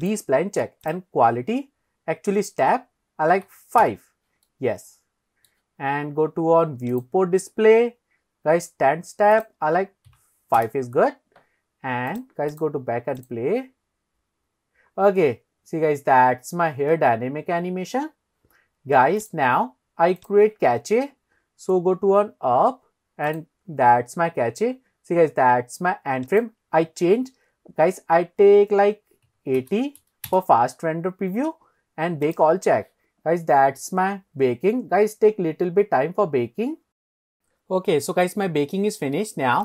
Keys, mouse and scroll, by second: 0.2 click, 0.9-3.9 drag, 4.5-5.5 middle drag, 6.9 click, 7.4 scroll down 2, 9.4 click, 12.1 click, 12.5 click, 13.2 click, 19.6 click, 20.2 click, 21.7-22.6 scroll up 5, 23.3 click, 24.2-25.3 scroll down 2, 26.3-30.8 drag, 31.4-32.3 scroll down 2, 32.3 click.